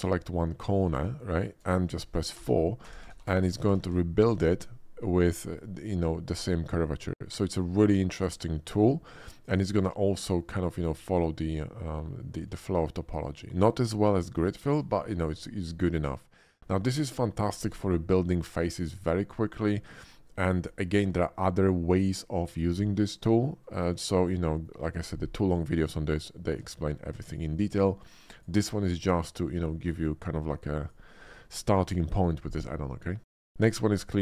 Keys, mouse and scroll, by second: 0.1 middle click, 0.6 shift+middle click, 1.0 shift+middle click, 1.5 shift+middle click, 2.5 4, 3.3 4, 4.6-5.6 middle drag, 7.0 middle click, 7.9 shift+middle click, 8.3 shift+middle click, 9.0 shift+middle click, 10.9 shift+middle click, 11.1 shift+middle click, 13.0 middle click, 14.5 shift+middle click, 15.0 shift+middle click, 15.9 shift+middle click, 20.2 shift+middle click, 23.8 shift+middle click, 24.2 shift+middle click, 26.6 Tab, 27.0 x, 27.3 click, 28.3 click, 29.8 click, 34.1 click.